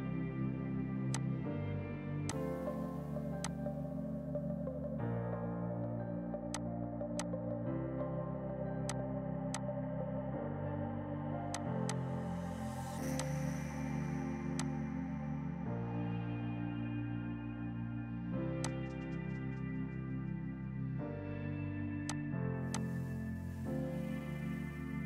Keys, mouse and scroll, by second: 1.1 click, 2.9 right click, 3.3 F2, 3.5 click, 4.4 right click, 6.6 click, 8.9 click, 11.2 ctrl+g, 11.6 shift+click, 11.7 c, 12.0 click, 12.5 ctrl+u, 12.8 Escape, 13.2 click, 15.6 right click, 18.7 click, 22.1 click, 22.8 shift+click, 23.4 Delete.